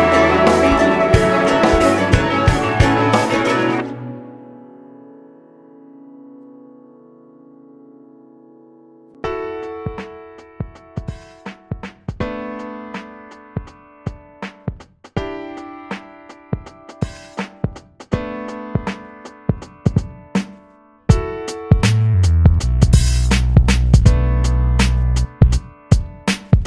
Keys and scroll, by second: 0.0 ctrl+c, 2.7 ctrl+v, 5.2 ctrl+v, 7.1 Right, 7.4 BackSpace, 7.6 8, 7.8 Down, 7.9 Right, 8.1 BackSpace, 8.5 4, 16.8 s, 20.9-21.9 typing, 24.2 F9.